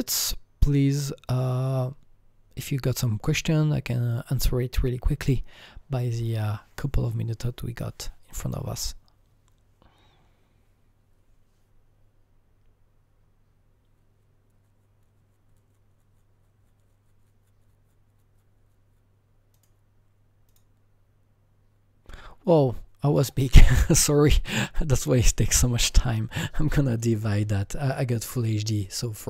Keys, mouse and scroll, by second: 19.6 click, 20.5 click, 24.5 click, 25.8 click, 25.8 click, 25.9 double click, 27.0 click.